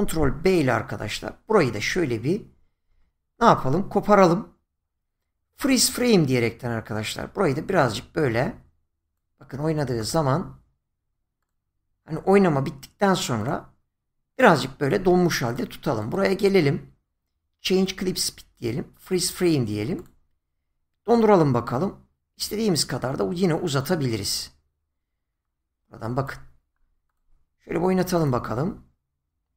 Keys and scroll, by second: 0.9 ctrl+b.